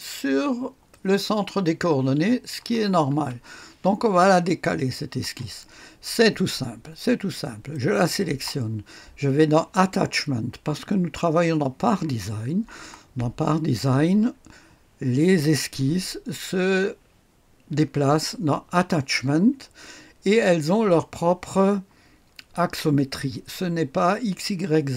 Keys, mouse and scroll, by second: 0.8-2.5 drag, 2.8-3.2 typing, 7.6 click.